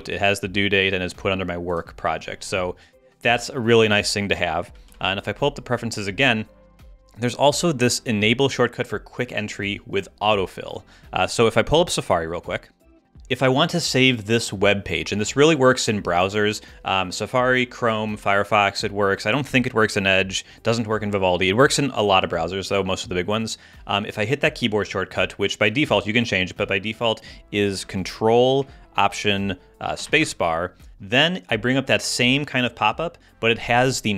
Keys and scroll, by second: 4.9 super+,, 30.0 ctrl+alt+space.